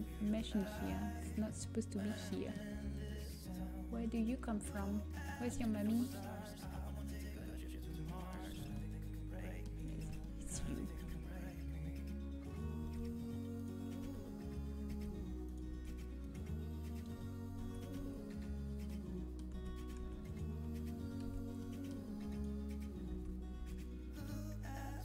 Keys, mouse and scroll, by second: 1.5-3.3 drag, 3.3 middle click, 4.3-8.6 drag, 8.6 Tab, 8.6-9.9 middle drag, 9.9 click, 11.4 Tab, 14.0 Tab, 14.8 Tab, 15.6 Tab, 17.6 a, 17.9 a, 19.9 Tab, 19.9 a, 20.2-24.0 drag, 21.6 h, 23.2 Tab, 24.0 a.